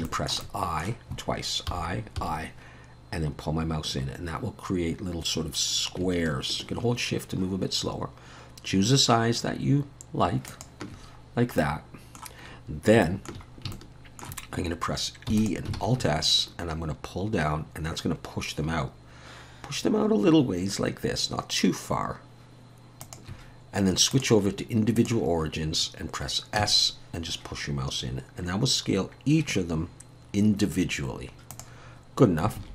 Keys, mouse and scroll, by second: 0.1 shift+middle click, 0.4 shift+middle click, 1.7 i, 11.3-11.6 scroll down 2, 11.6 middle click, 13.0 shift+middle click, 13.5 scroll up 2, 13.7 shift+middle click, 15.3 e, 15.7 alt+s, 24.1 click, 26.6 s, 32.6 alt+a.